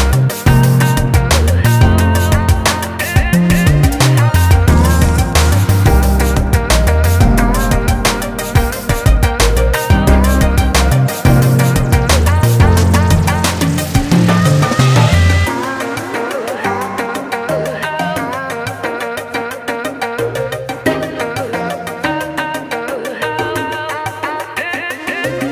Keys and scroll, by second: 24.5 ctrl+Return.